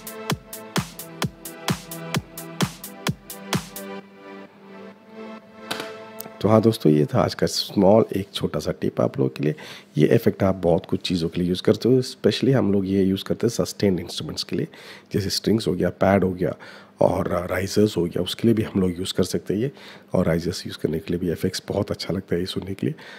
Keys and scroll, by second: 5.3 -.